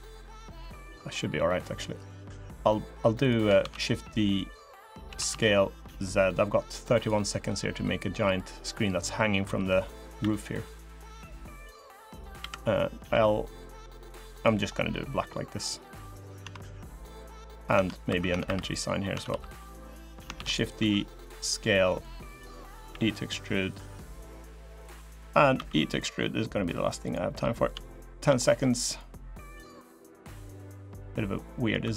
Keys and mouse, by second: 0.2 middle click, 1.2 middle click, 3.0 click, 3.4 shift+d, 4.1 click, 4.8 s, 8.1 click, 9.2 click, 10.0 e, 11.9 click, 12.2 l, 12.9 g, 14.7 click, 16.2 Tab, 16.6 click, 17.1 click, 17.5 Tab, 17.8 3, 18.0 Tab, 18.2 3, 18.4 click, 18.9 Tab, 19.0 3, 19.3 click, 19.6 middle click, 20.1 shift+d, 20.5 s, 22.7 e, 24.2 click, 25.3 e, 27.1 middle click, 27.8 shift+middle click, 28.6 click, 29.5 middle click, 29.6 click, 30.2 click, 31.2 click, 31.4 middle click, 31.6 2.